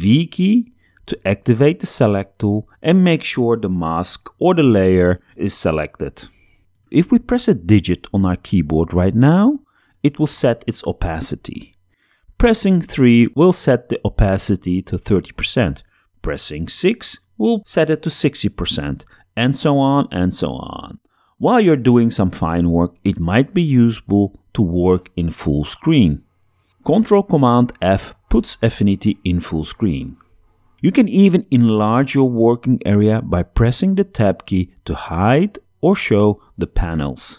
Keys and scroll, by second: 0.1 v, 7.2 3, 16.0 6, 28.3 ctrl+super+f, 33.9 super+Tab, 34.5 Tab, 35.9 Tab.